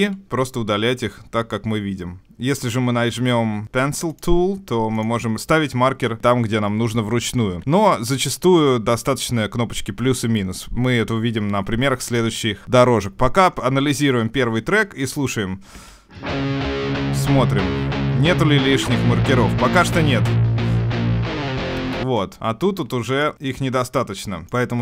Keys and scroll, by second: 2.2 Escape, 7.6 super+z, 11.7 Home.